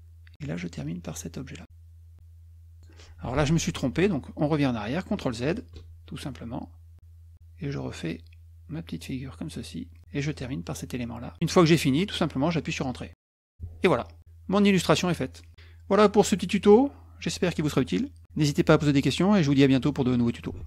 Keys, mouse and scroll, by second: 1.0 drag, 6.1 ctrl+z, 11.4 click, 13.8 Return.